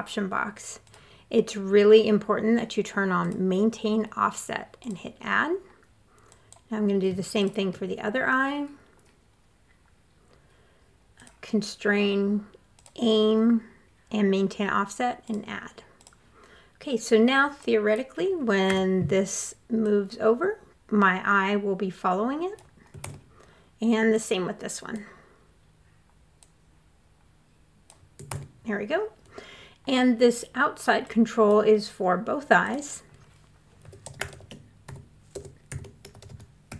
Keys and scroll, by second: 18.1 w, 22.4 super+z, 27.7 super+z, 33.2-36.7 typing.